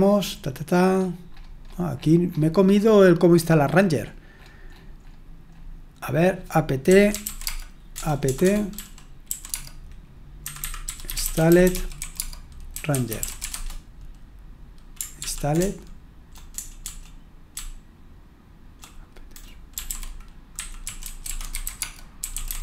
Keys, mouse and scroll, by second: 1.0-2.6 scroll down 1, 2.6-6.2 scroll up 1, 6.2-6.9 scroll up 1, 6.6-13.9 typing, 6.9 click, 15.2 ctrl+p, 15.6-22.6 typing.